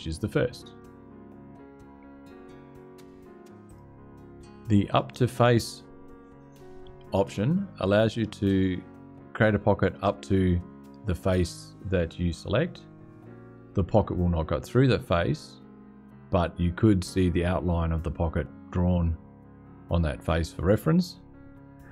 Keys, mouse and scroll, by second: 0.5-2.2 scroll up 2, 3.4 click, 4.5 click.